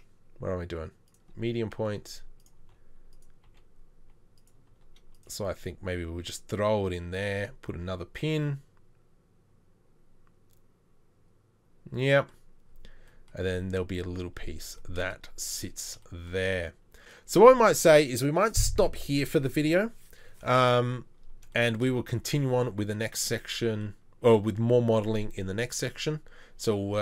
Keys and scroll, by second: 1.8 g, 3.1 r, 5.2 r.